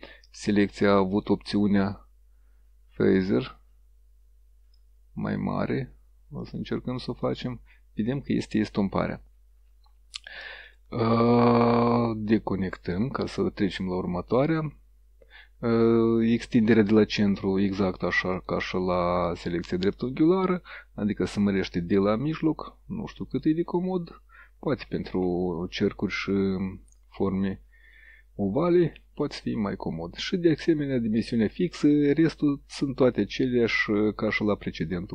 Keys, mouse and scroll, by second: 0.3 click, 1.2 click, 3.1-5.0 drag, 6.5 click, 7.3 click, 10.7 click, 11.4 click, 13.0 click, 18.4 click, 20.1-23.6 drag, 29.3 click, 34.3 click, 34.9 click.